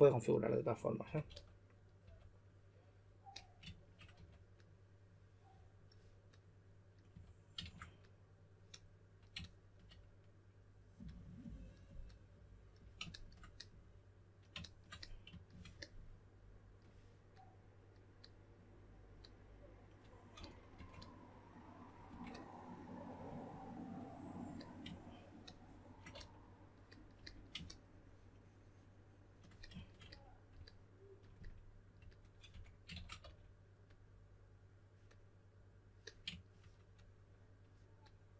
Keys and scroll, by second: 0.7-2.0 typing, 4.1 2, 7.1 typing, 20.1-22.0 typing, 26.1 s, 32.4 2, 33.2 s.